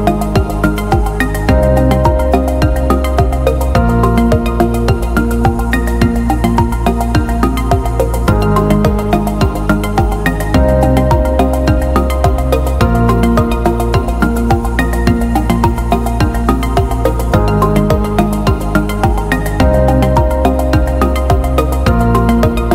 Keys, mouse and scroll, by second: 4.0 click, 6.1-12.6 drag, 16.0 click.